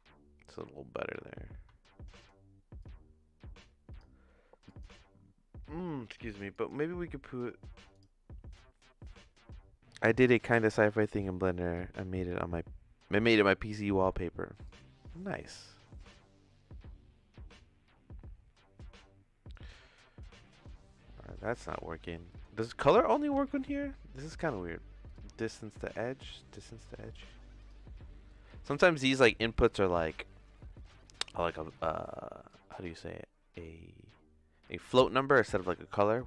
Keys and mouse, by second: 0.4-2.2 drag, 2.8-4.0 drag, 4.6-5.8 drag, 6.5-8.1 drag, 8.8 middle click, 13.9 middle click, 14.6 click, 18.5 click, 20.0 click, 21.6 middle click, 22.3 click, 23.5 shift+s, 24.3 click, 25.9-27.7 drag, 28.3 click, 30.1 click, 32.4-34.1 drag, 34.6 click, 35.5 click.